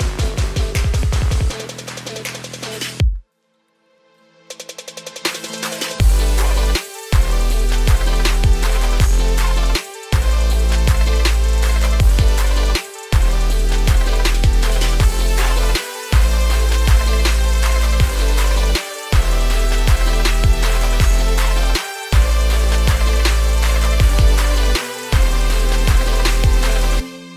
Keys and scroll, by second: 8.4 ctrl+space, 13.2 ctrl+g, 15.3 ctrl+space, 20.8 ctrl+space.